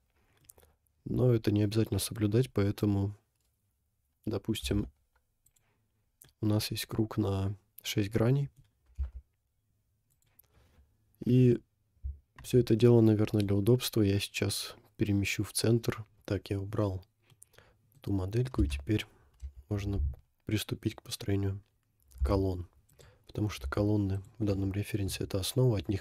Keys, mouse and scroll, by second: 0.5-1.8 middle drag, 2.1-2.7 middle drag, 4.7 g, 6.0 scroll down 2, 6.3 middle click, 8.1-8.8 middle drag, 8.9 g, 10.1 click, 11.3 KP_7, 12.6-13.0 scroll down 3, 13.0 middle click, 16.2 scroll up 1, 17.4 middle click, 18.6 Tab, 19.4 a, 22.1 g, 23.8 s, 25.1 KP_1.